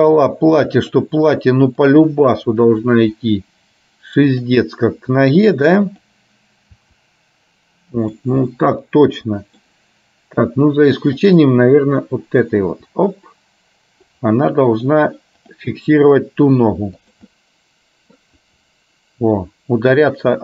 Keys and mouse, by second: 1.8 click, 2.3 middle click, 3.2 r, 7.0 r, 8.6-9.7 middle drag, 11.3 click, 11.7 middle click, 12.8 r, 16.1 r, 17.6 middle click, 18.6 r.